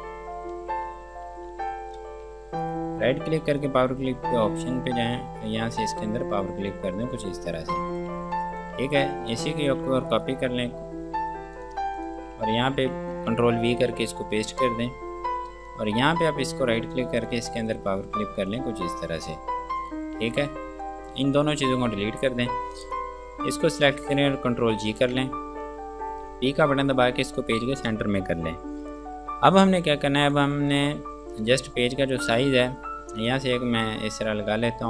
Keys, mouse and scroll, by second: 0.8 ctrl+space, 1.7 F2, 1.9 click, 2.9 right click, 3.8 click, 6.5-7.0 scroll down 1, 7.4 F2, 7.7 click, 8.2 Escape, 8.3 F2, 8.6 click, 9.0 Escape, 9.6 click, 9.8 click, 10.3 right click, 11.8 click, 13.0 ctrl+v, 14.0 click, 16.7 right click, 17.4 click, 22.3 Delete, 22.5-23.1 scroll down 1, 23.2 click, 25.0 ctrl+g, 26.8-27.5 typing, 30.5 click, 31.4-33.4 scroll down 1, 33.4 click.